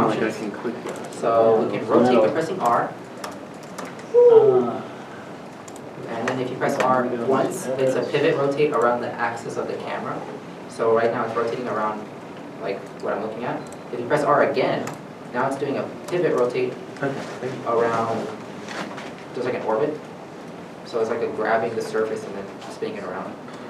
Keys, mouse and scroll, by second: 1.0 n, 1.0 middle click, 1.3 scroll down 1, 2.8 r, 5.6 r, 5.6 right click, 15.0 r, 20.5 r, 20.5 right click, 21.4 r.